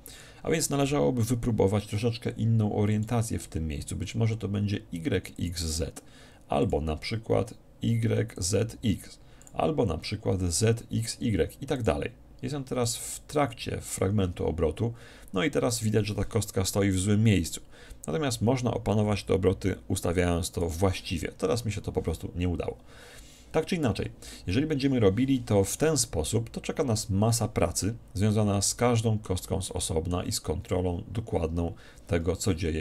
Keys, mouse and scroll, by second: 2.9-4.7 drag, 6.6-8.3 drag, 9.4-11.0 drag, 11.7-13.5 drag, 17.0-18.7 drag, 27.9-29.7 middle drag, 29.9-31.5 middle drag.